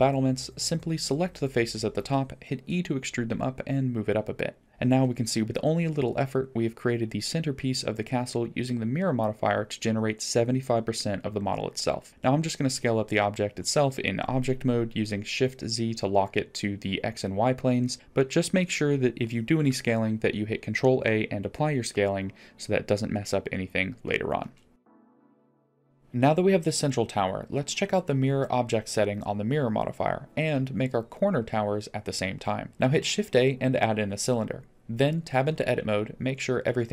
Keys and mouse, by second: 0.9 e, 3.5-4.0 middle drag, 4.3 Tab, 4.7 middle click, 6.3 click, 6.8-7.8 middle drag, 10.0 middle click, 12.1 Tab, 12.4 Tab, 15.3 s, 21.2-21.7 middle drag, 21.4-21.7 drag, 22.3-23.1 drag, 22.3-23.7 middle drag, 24.9 ctrl+a, 26.0 click, 27.5-30.0 drag, 30.8-31.1 shift+middle drag, 32.7 shift+a, 34.0 shift+a, 36.3 middle click.